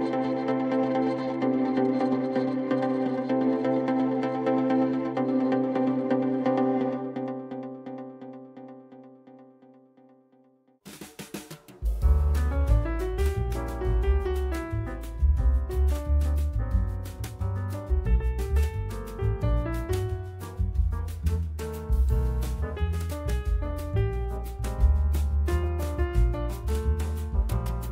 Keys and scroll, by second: 1.7 ctrl+z, 4.3 alt+1, 6.6 alt+c, 11.3 F4, 12.6 F4, 14.2 F4, 15.8 F4, 19.2 F4, 19.6 F4, 20.8-21.9 typing, 22.4 F3, 25.4 F3.